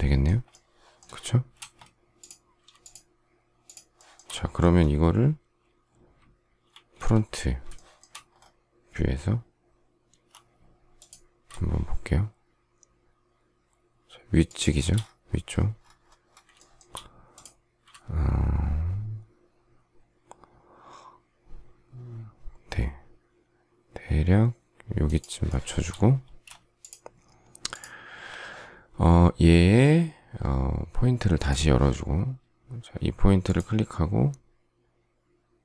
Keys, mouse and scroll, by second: 1.5 space, 2.8 shift+click, 3.6 shift+click, 3.9 shift+middle click, 4.1 shift+double middle click, 6.6 alt+f, 7.7 shift+middle click, 10.1 m, 14.4 shift+click, 16.7 shift+middle click, 25.0 shift+click, 25.4 shift+middle click, 25.6 shift+double middle click, 26.2 space.